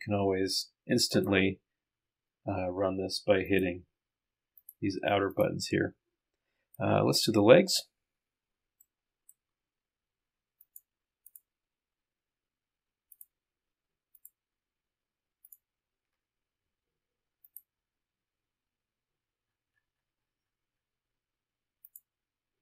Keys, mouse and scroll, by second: 1.1 click, 3.5 click, 4.6 click, 5.4 click, 7.7 middle click, 10.6 click, 11.3 click, 13.1 ctrl+click, 14.2 ctrl+click, 15.5 ctrl+click, 17.5 click, 19.2-21.5 middle drag, 21.9 click.